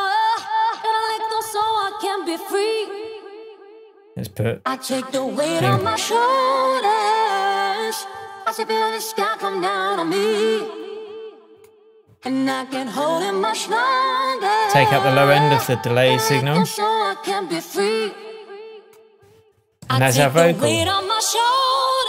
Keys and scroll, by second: 19.8 Tab.